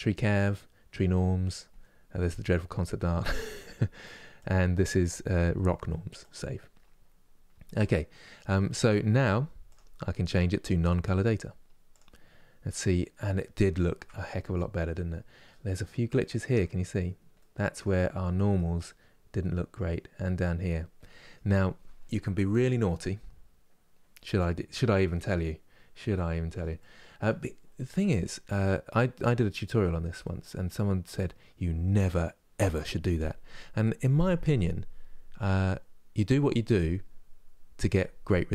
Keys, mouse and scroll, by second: 8.0-11.8 middle drag, 11.8 click, 12.5-15.3 middle drag, 15.3-15.8 scroll up 3, 15.8 shift+middle click, 16.4-17.1 scroll up 2, 17.1-24.1 middle drag, 24.1-24.7 scroll down 2, 24.7 middle click, 25.3-25.6 scroll down 2, 26.4-27.1 scroll up 1, 27.1-28.8 middle drag, 28.8 scroll up 2, 29.5-38.5 shift+middle drag.